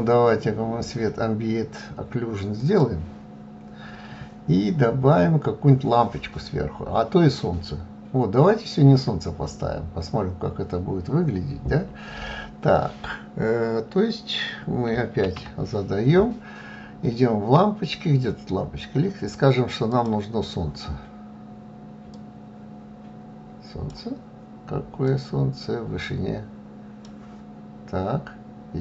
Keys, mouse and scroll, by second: 1.2-7.6 drag, 20.9-28.8 drag.